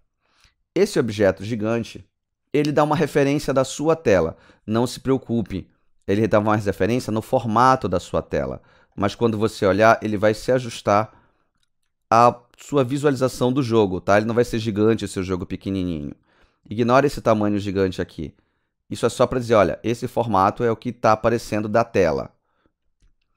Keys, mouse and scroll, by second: 0.0 alt+click, 6.1 scroll up 4, 6.5 scroll down 6, 8.3 alt+click, 9.1 alt+right click, 9.6 alt+click, 10.0 alt+right click, 10.4 alt+click, 11.1 middle click, 11.4 right click, 19.0 alt+right click, 19.1 alt+right click, 19.5 alt+click, 19.8 alt+middle click.